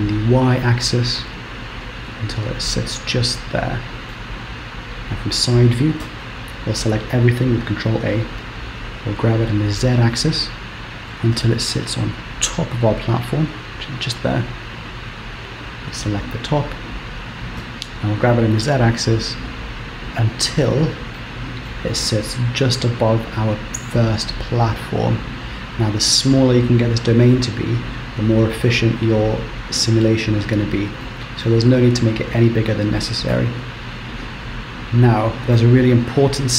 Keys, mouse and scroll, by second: 2.6-3.0 scroll down 1, 3.0 middle click, 4.9 KP_3, 6.3 a, 7.2-7.8 scroll up 1, 8.0 g, 10.1-11.0 scroll up 3, 11.4 g, 14.3-15.0 scroll down 3, 15.0 click, 15.5 click, 17.6 g, 20.8 scroll up 2, 21.3 shift+middle click, 22.6 g, 25.6-28.5 scroll down 1, 31.2 middle click, 32.9 middle click, 34.4 Tab, 34.5 KP_0, 35.5 KP_1, 36.2-36.5 scroll up 1.